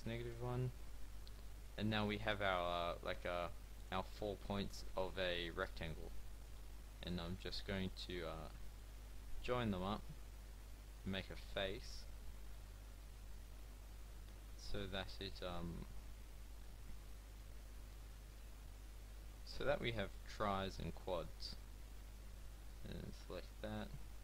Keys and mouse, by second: 1.0 a, 1.9 a, 7.3 f, 9.4 f, 11.2 f, 15.3-16.6 drag, 19.5 f, 21.9 click.